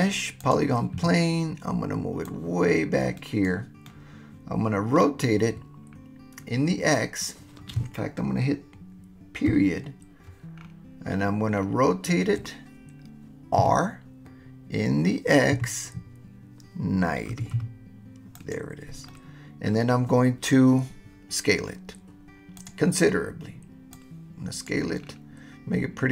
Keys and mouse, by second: 2.2-3.4 drag, 3.8-5.1 middle drag, 9.5 KP_Decimal, 13.6 r, 15.7 x, 17.3 9, 17.5 0, 18.4 click, 19.1-19.8 drag, 22.6 click, 23.9 click.